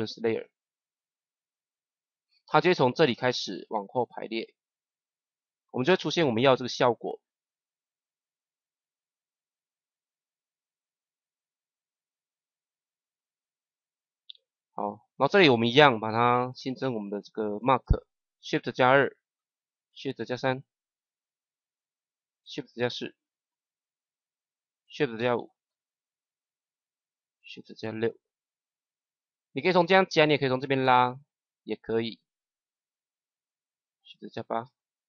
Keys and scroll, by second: 5.8 KP_0, 17.4 shift+2, 20.1 shift+3, 22.7 shift+4, 25.1 shift+5, 27.5 shift+6, 34.5 shift+8.